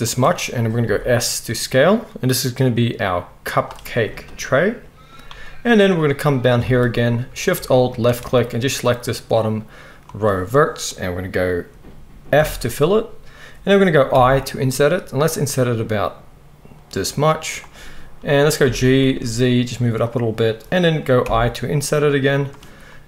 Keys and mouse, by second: 0.8 s, 6.6 alt+a, 7.9 alt+shift+click, 8.0-14.1 alt+shift+middle drag, 12.4 f, 14.1 i, 18.6 g, 21.2 i.